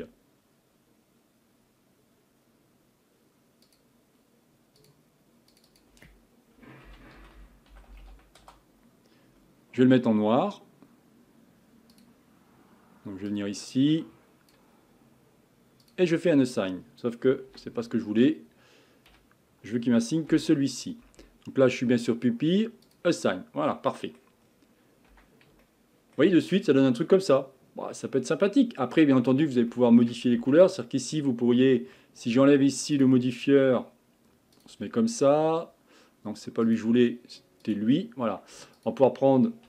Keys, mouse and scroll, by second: 3.6-5.6 drag, 5.7-8.0 drag, 8.0 l, 11.9 click, 15.8-17.6 drag, 17.6 ctrl+z, 19.1 a, 20.3 l, 22.8 click, 23.7 middle click, 24.4-25.1 scroll down 1, 25.1 Tab, 25.6-26.5 shift+middle drag, 26.5 scroll down 1, 26.8-29.3 middle drag, 29.3 scroll up 2, 29.7-30.3 shift+middle drag, 30.3 Tab, 32.9 click, 34.7 click, 37.0 click, 38.8 click.